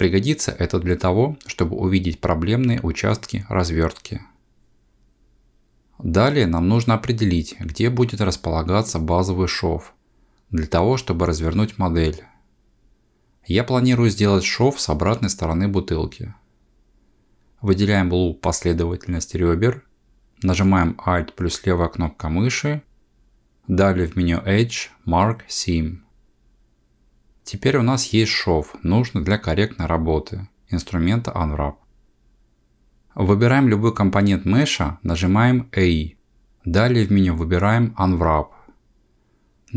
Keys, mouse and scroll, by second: 20.6 alt+click, 23.2 ctrl+e, 36.5 a, 39.2 u.